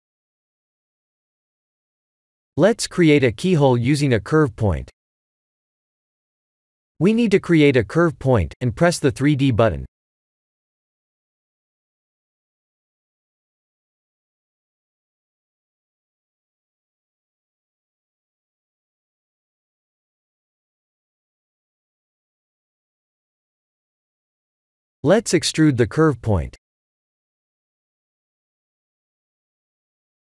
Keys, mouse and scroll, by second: 0.5 middle click, 2.2 shift+z, 2.6-3.2 scroll down 5, 3.0 click, 3.4 middle click, 5.1 KP_1, 6.4 click, 6.4 shift+z, 6.6 click, 8.1 shift+a, 15.3 click, 21.6 Tab, 21.9-22.4 scroll up 4, 22.4 shift+middle click, 23.5-24.4 scroll up 1, 24.4 click, 25.5 click, 26.3 e.